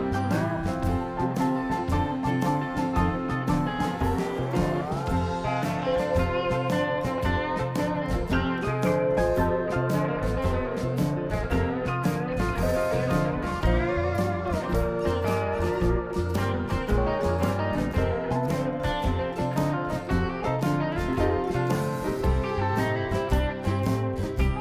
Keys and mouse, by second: 1.3-2.2 ctrl+z, 2.9 KP_7, 4.3 shift+a, 6.6 Tab, 7.3 f, 8.6 click, 9.5 KP_7, 10.3 Tab, 11.3-13.6 drag, 11.9 Tab, 16.3-18.6 drag, 16.8 right click, 17.7-21.0 right drag, 21.0 click, 21.4 middle click, 22.0-23.2 right drag, 22.4-24.6 drag.